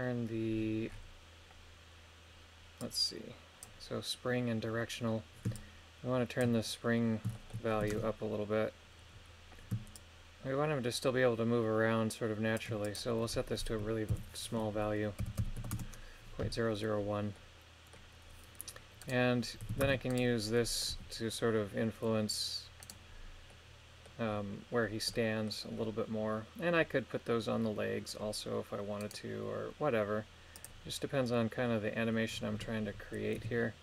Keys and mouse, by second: 2.7 click, 5.5 shift+click, 7.3 shift+middle click, 7.9 shift+space, 10.0-12.6 shift+drag, 12.8-15.8 drag, 15.4 KP_0, 17.3 middle click, 19.9 ctrl+Tab, 20.1 right click, 20.5 middle click, 20.9 g, 22.8 right click, 23.5 middle click, 25.1 middle click, 29.0 right click, 30.5 click, 33.4 KP_3.